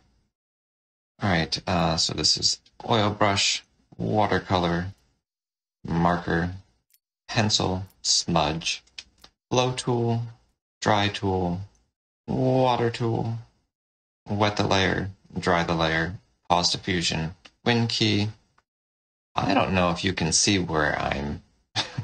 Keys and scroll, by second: 1.6 shift+o, 3.4 shift+w, 4.9 shift+m, 6.7 shift+n, 7.7 n, 9.1 o, 10.4 y, 11.7 w.